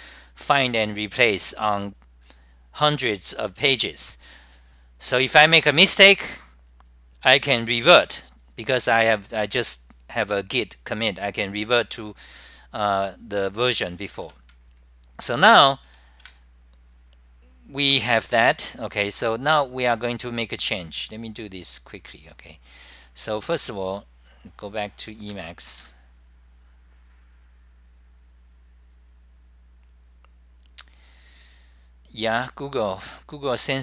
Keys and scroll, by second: 0.0-0.6 typing, 0.1 scroll up 10, 2.6-3.3 typing, 2.8 scroll up 10, 5.4-6.1 typing, 5.6 scroll up 10, 7.7-8.4 typing, 7.9 scroll up 10, 10.3-11.0 typing, 10.5 scroll up 10, 16.3 super+r, 20.2 Delete, 25.1-26.9 typing, 25.4 scroll up 10.